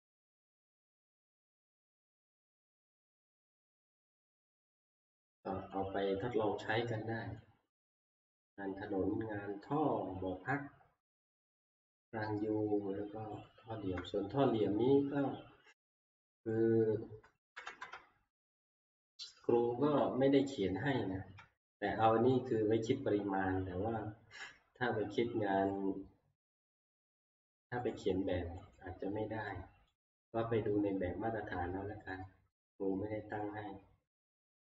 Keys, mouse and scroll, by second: 0.4 click, 3.0 click, 3.7 middle click, 3.9 middle click, 4.2-4.7 scroll up 8, 5.6 scroll, 5.8 shift+middle click, 6.7 middle click, 8.1 middle click, 10.7 shift+middle click, 12.1 middle click, 13.5 click, 14.5 shift+middle click, 14.5 click, 16.5 click, 17.5 2, 17.8 Return, 20.9 middle click, 21.2 scroll up 3, 22.4 middle click, 22.8 scroll up 3, 25.7 click, 26.6 click, 27.7 middle click, 27.9 click, 28.8 click, 30.1 click, 34.2 click, 34.2 scroll.